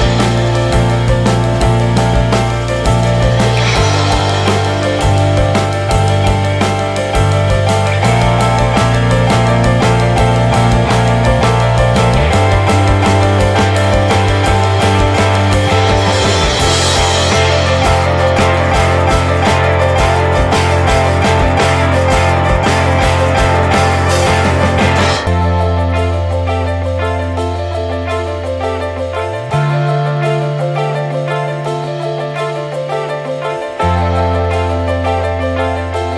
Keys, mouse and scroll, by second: 0.2-2.4 drag, 2.4-3.7 scroll up 8, 2.8-3.1 shift+middle drag, 3.5 shift+middle drag, 4.0 shift+middle click, 4.9-7.2 drag, 7.4-9.5 shift+drag, 11.1-14.4 drag, 15.6-19.5 drag, 22.8-24.9 shift+drag, 26.6-28.6 shift+drag, 28.6 ctrl+z, 29.0-31.3 shift+drag, 31.6 click, 32.2 click, 32.6 Tab, 33.1 scroll down 1, 33.4 shift+middle click, 33.8 a.